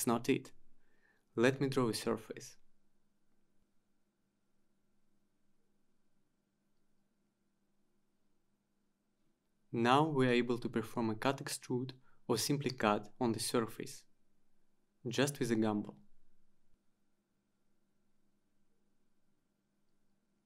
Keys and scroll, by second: 14.2 ctrl+z, 19.3 Return.